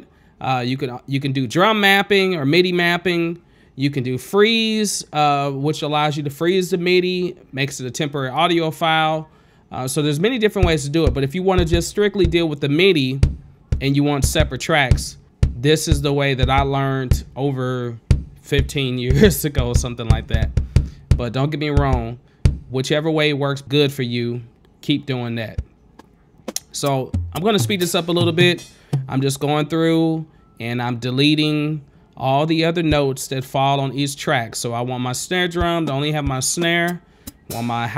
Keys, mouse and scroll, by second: 1.1-2.8 drag, 4.0 click, 6.9 click, 7.0 alt+s, 8.1 ctrl+space, 8.1 click, 23.2 space, 23.6 click, 24.3 alt+s, 24.3 click, 25.6 scroll up 1, 25.7 click, 25.9 click, 26.2 click, 26.8 click, 27.4 click, 27.9 click, 28.9 click, 29.2 click, 29.3 click, 29.6 click, 29.7 click, 29.9 click, 30.4 click, 31.0 click, 31.7 click, 31.9 click, 32.3 click, 32.4 click, 32.5 click, 32.7 click, 32.8 click, 33.0 click, 33.4 click, 34.1 ctrl+space, 35.6 alt+s, 35.9 space, 36.5 click, 36.9 click, 37.2 click, 37.5 click, 37.7 ctrl+space.